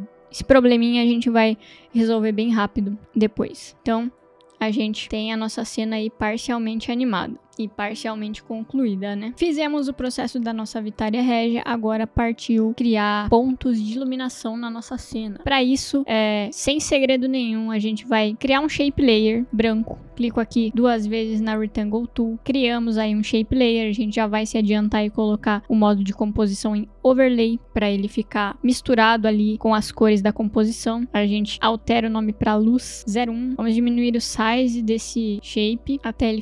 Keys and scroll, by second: 5.6 space, 31.0 Return, 31.8-33.5 typing.